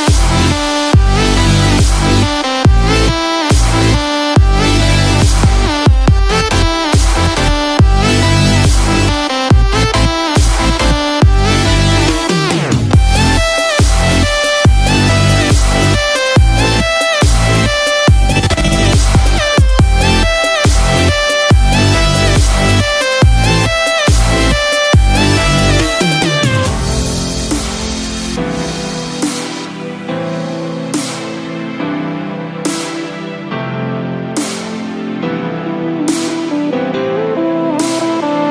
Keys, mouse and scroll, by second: 0.4 shift+middle click, 0.7-1.3 scroll up 3, 1.7 shift+middle click, 2.4 click, 4.9 shift+d, 12.1-12.7 scroll down 3, 12.7 middle click, 12.7 scroll down 1, 13.8-14.1 scroll down 2, 14.1 click, 14.5 scroll down 2, 14.8 middle click, 15.3-15.7 scroll up 5, 15.9 shift+middle click, 16.2 middle click, 18.5 click, 18.9 scroll down 1, 19.2 middle click, 24.6 click, 26.9 middle click, 28.6 click, 28.9 shift+a, 35.8-36.4 scroll down 2.